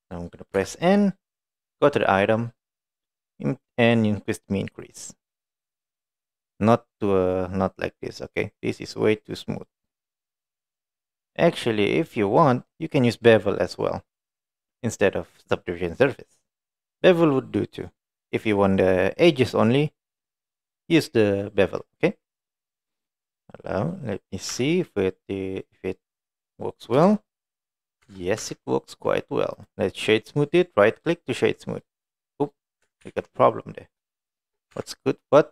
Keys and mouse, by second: 0.6 n, 2.1 click, 3.7-14.7 drag, 16.6-18.4 drag, 22.0 middle click, 23.1 middle click, 24.0 middle click, 24.6 Tab, 24.9-26.6 middle drag, 27.0 KP_1, 28.1 Tab, 28.5 Tab, 29.1 click, 29.6-31.5 right drag, 31.8-32.6 middle drag, 33.1 ctrl+z, 34.1 shift+middle click, 34.8 Tab, 35.3-35.5 middle drag.